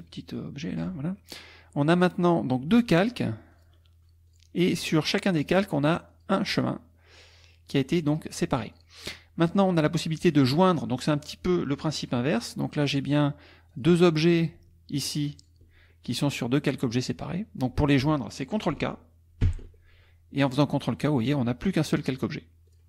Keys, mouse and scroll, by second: 2.8 click, 3.5 click, 4.3 click, 4.9 click, 5.4 click, 6.1 click, 6.6 click, 7.5 middle click, 8.7 click, 9.5 click, 12.8 click, 13.7 click, 14.9 shift+click, 15.4 shift+click, 19.5 ctrl+k, 22.7 click.